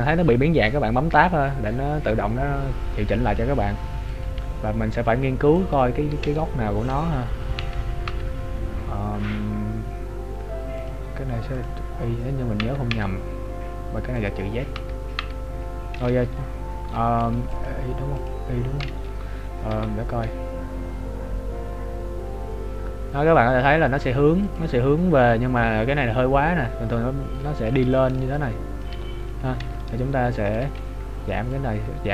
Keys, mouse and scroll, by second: 4.2 click, 6.3 z, 7.6 Tab, 10.8 click, 12.6 Tab, 14.3 click, 14.8 Tab, 17.5 click, 19.8 g, 27.9 click, 28.3 click, 28.3 d, 28.9 d, 29.8 right click, 30.5 d, 31.6 click.